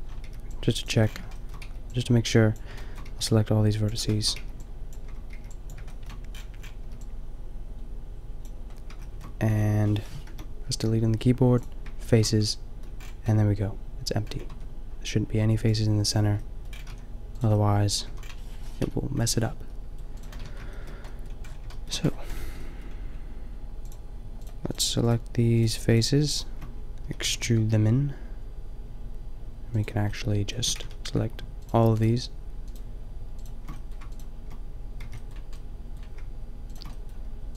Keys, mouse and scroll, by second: 0.3 b, 1.6 b, 3.1 b, 4.4 b, 5.3 b, 6.9 b, 10.2 Return, 10.7 Delete, 14.5 Tab, 16.5 click, 16.9 a, 17.6-18.1 middle drag, 18.0 a, 18.8-19.8 middle drag, 18.8 KP_5, 20.2 middle click, 20.4 Tab, 21.3 middle click, 27.0 e, 30.8 ctrl+z, 35.0 shift+b, 35.6 middle click, 36.9 middle click.